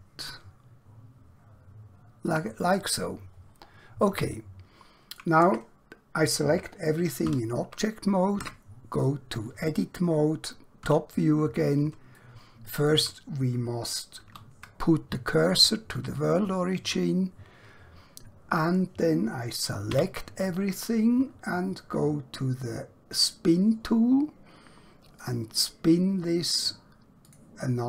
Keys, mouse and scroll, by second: 2.2 click, 3.5-4.2 scroll down 1, 4.4 shift+middle click, 5.4 Tab, 7.2 a, 8.4 Tab, 10.9 KP_7, 12.2 shift+middle click, 14.2 shift+s, 16.1 click, 20.0 a, 23.2 click.